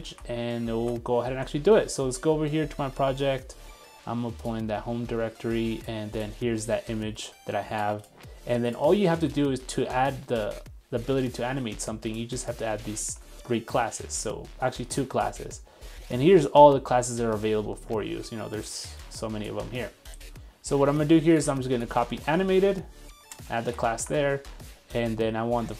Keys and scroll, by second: 9.1 super+Tab, 13.0 super+3, 16.0 super+3, 22.0 super+c, 23.6 super+v.